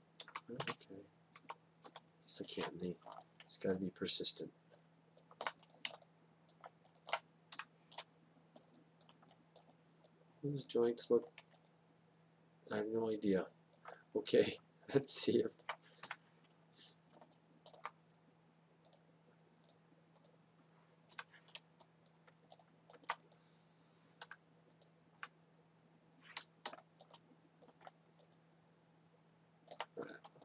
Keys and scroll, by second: 0.0 Down, 2.4 Up, 8.5 F8, 17.0 F8, 22.1 F8, 25.2 F8.